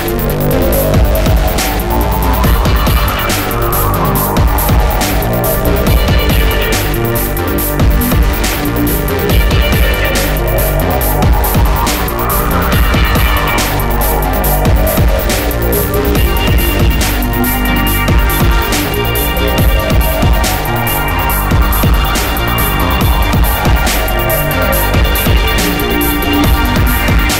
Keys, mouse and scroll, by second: 3.5 middle click, 4.2 middle click, 7.3 scroll up 1, 9.3 middle click, 9.9 middle click, 9.9 scroll down 1, 11.3 middle click, 12.3-12.7 scroll down 1, 15.7 middle click, 16.3 scroll up 1, 19.0 scroll up 1, 20.9 middle click, 21.8 ctrl+click, 22.4 middle click, 22.6 middle click, 23.3 ctrl+click, 24.0 middle click, 24.6 ctrl+click, 24.8 ctrl+click, 25.0 middle click, 26.7 ctrl+click, 27.2 middle click.